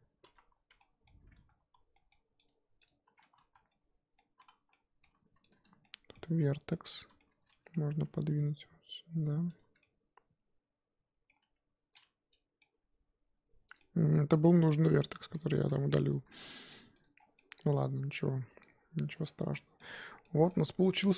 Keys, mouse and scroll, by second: 0.3 z, 0.8-1.3 middle drag, 1.3 Tab, 1.7 z, 1.9-2.4 middle drag, 2.4 click, 2.8 click, 3.0 Tab, 3.5 z, 4.2-4.5 middle drag, 4.5 a, 4.7-5.5 middle drag, 5.5 click, 5.8-7.0 shift+middle drag, 7.0 z, 7.4 middle click, 8.2 g, 9.6 Tab, 9.8-11.4 middle drag, 11.4 Tab, 11.9-12.7 middle drag, 12.7 g, 13.8-14.6 middle drag, 14.6 ctrl+z, 15.0 ctrl+z, 15.8 Tab, 16.1 Tab, 16.3-17.0 middle drag, 17.0 click, 17.1 scroll down 5, 17.4-19.5 middle drag, 19.5 z, 19.5 middle drag, 19.8 scroll up 1, 19.9 scroll down 4, 20.2-21.1 middle drag.